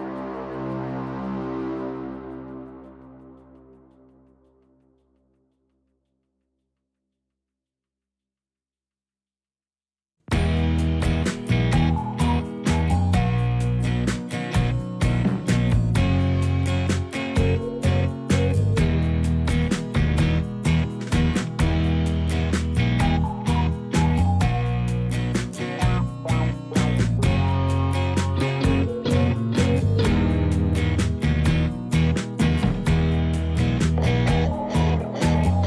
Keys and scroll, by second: 1.1 g, 1.8 x, 4.0 g, 4.4 z, 6.2 alt+a, 31.4 x.